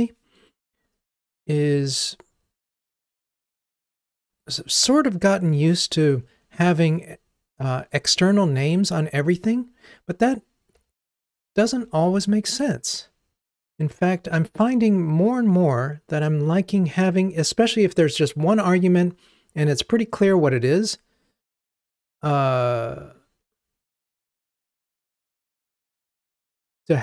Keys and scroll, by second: 10.8 super+x, 12.2 super+v.